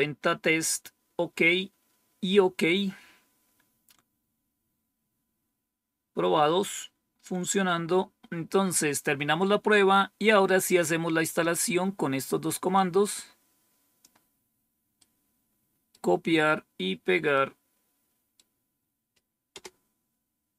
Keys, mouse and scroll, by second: 6.5-7.3 scroll down 1, 8.3-9.0 scroll down 1, 12.7-14.0 drag, 14.9-15.9 right drag, 17.3-18.3 right drag, 19.4 Return.